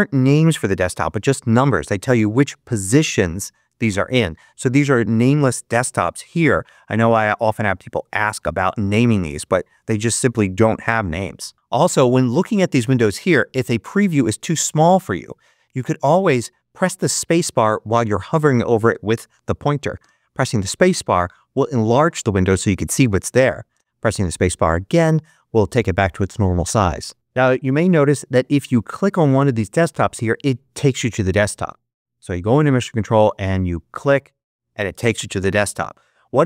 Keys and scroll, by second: 19.9 space, 23.6 space, 32.4 ctrl+Up.